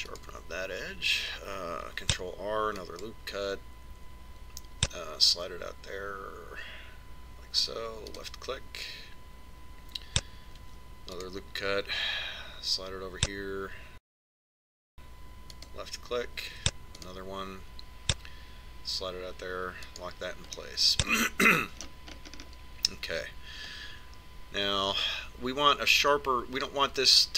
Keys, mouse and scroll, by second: 3.8 ctrl+r, 12.5 ctrl+r, 17.4 ctrl+r, 21.6-23.2 middle drag.